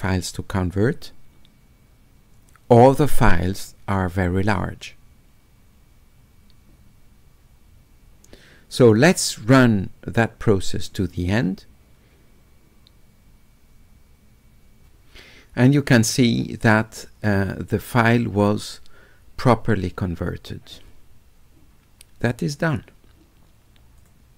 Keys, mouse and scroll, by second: 22.6 click, 24.0 click.